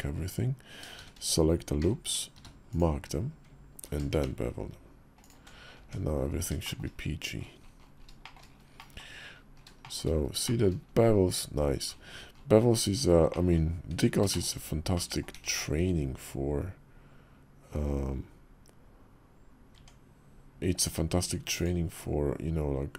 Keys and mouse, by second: 0.7 shift+`, 2.1 q, 3.6 ctrl+b, 5.6 Tab, 6.4 shift+middle drag, 8.0 shift+middle click, 8.5 middle click, 9.6 shift+middle click, 10.2 shift+middle drag, 13.0 middle drag, 13.6 Tab, 14.1 shift+click, 14.7 click, 15.1 `, 19.5 Tab, 21.4-22.9 drag.